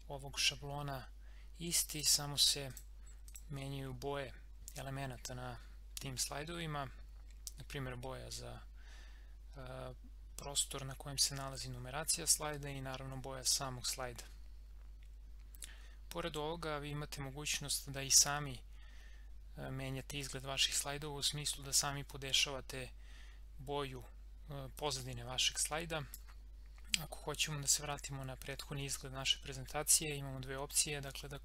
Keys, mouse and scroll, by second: 1.9 click, 24.8-28.5 drag.